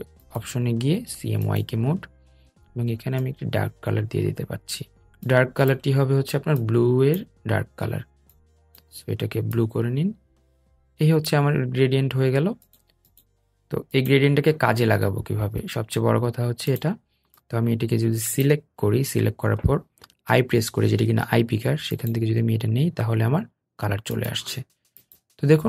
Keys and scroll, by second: 17.8 i.